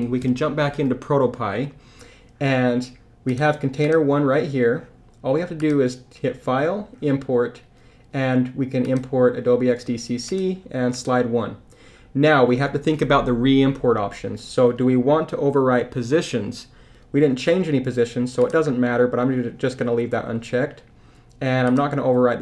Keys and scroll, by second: 0.2 super+Tab.